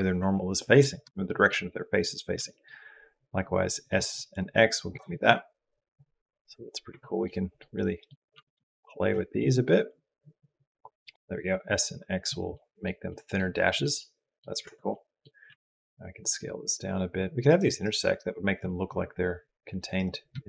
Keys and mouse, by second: 1.1 shift+click, 2.2 s, 7.2 click, 7.5 click, 8.2 s, 11.1 s, 12.3 middle click, 12.9 middle click, 13.3 middle click, 13.8 middle click, 13.9 click, 14.5 Tab, 14.7 click, 15.3 s, 20.3 shift+d.